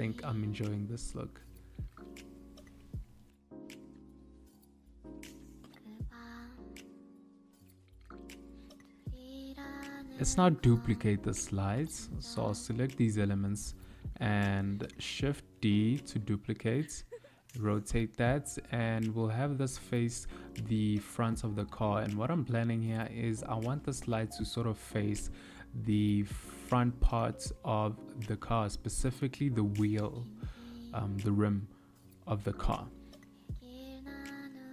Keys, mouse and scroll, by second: 3.4 KP_3, 5.5 z, 7.0 click, 8.6 click, 9.9 t, 10.2 click, 10.6 t, 11.9 click, 14.6 shift+middle click, 15.3 shift+d, 18.0 r, 20.0 g, 24.0 KP_1, 26.0 click, 27.6 r, 31.0 click, 32.2 r.